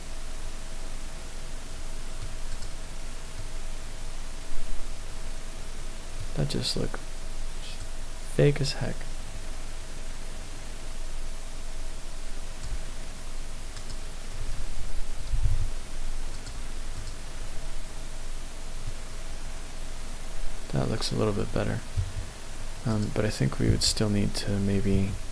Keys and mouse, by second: 2.5 click, 3.4-6.1 middle drag, 7.9-12.7 drag, 15.3 g, 15.5 z, 16.4 click, 17.0 click, 18.8-22.1 middle drag.